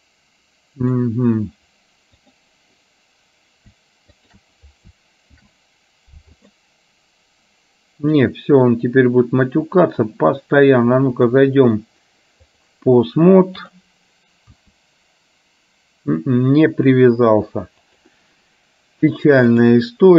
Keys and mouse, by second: 0.9 click, 4.4 shift+click, 5.3 ctrl+p, 9.7 click, 11.4-12.9 drag, 14.7 r, 19.5-20.1 drag.